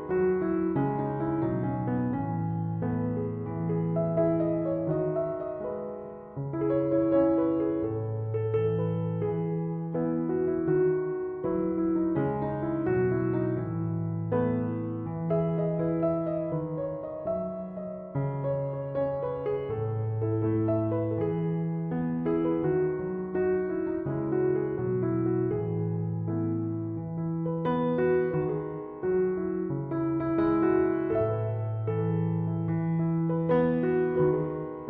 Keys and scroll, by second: 22.0 3, 22.3 Return, 25.6 3, 25.8 Return.